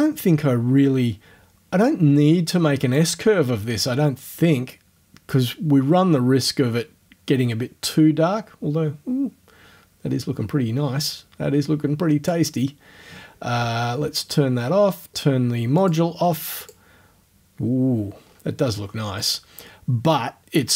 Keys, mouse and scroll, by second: 3.0-12.5 drag, 13.5 o, 15.8 click, 16.7 click, 18.2-18.5 scroll down 1.